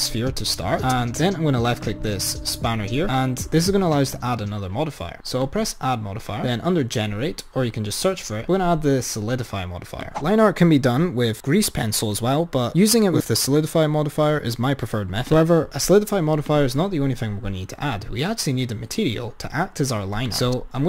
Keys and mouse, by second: 0.0 click, 1.8 click, 5.5-8.1 drag, 15.3 click, 16.4 click, 20.3 click.